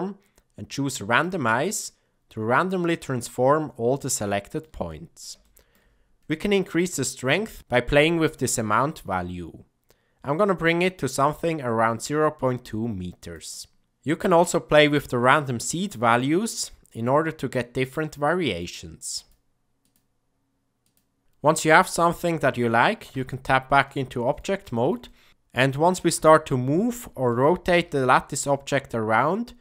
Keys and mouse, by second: 1.8-4.6 middle drag, 4.8 ctrl+middle click, 5.4 shift+middle click, 6.6 click, 7.6-13.4 shift+drag, 15.1 click, 17.0 click, 17.8 middle click, 18.4 middle click, 19.2 click, 19.8 click, 20.8 click, 23.0 Tab, 23.8-24.3 middle drag, 24.6 ctrl+middle click, 25.0 middle click, 26.2 g, 27.8 r.